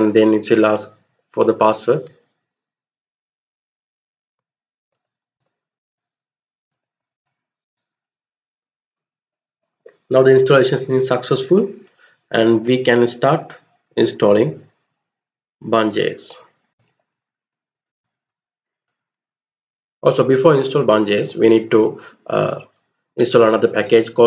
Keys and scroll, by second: 4.4-7.3 typing, 5.4 Return, 16.0-17.4 typing, 17.5 Return.